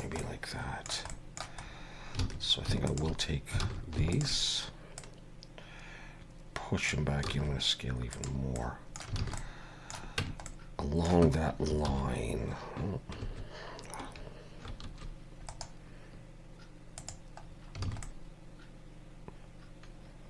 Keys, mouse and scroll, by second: 0.2 middle click, 1.1 middle click, 1.6 scroll up 2, 2.2 alt+a, 2.9 alt+shift+click, 3.6 alt+a, 4.1 alt+shift+click, 5.0 click, 7.2 s, 8.5 middle click, 9.2 alt+a, 9.4 middle click, 10.2 Tab, 10.5 middle click, 14.8 ctrl+2, 15.5 right click, 17.4-17.8 scroll down 3, 17.8 alt+a, 18.0 middle click.